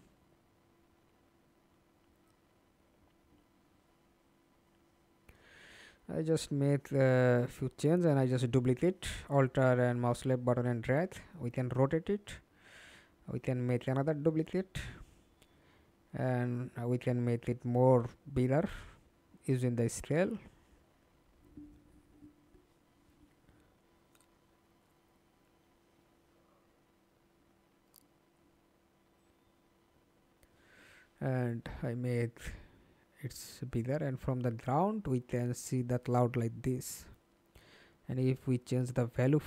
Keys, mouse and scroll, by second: 6.2 alt+click, 7.9 alt+right click, 8.6 e, 11.6 alt+click, 13.1-17.2 alt+scroll up 8, 17.2-19.0 scroll up 1, 19.2 ctrl+z, 26.2-27.2 typing, 27.9 Return, 29.4-30.3 typing, 33.0 f, 33.9 alt+click, 36.1 alt+click.